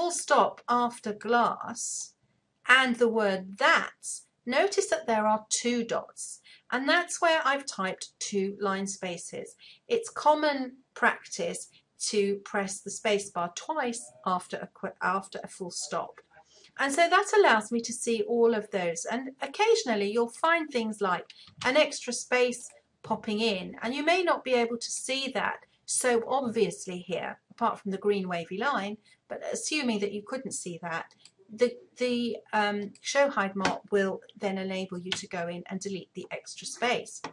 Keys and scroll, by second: 34.6 Delete.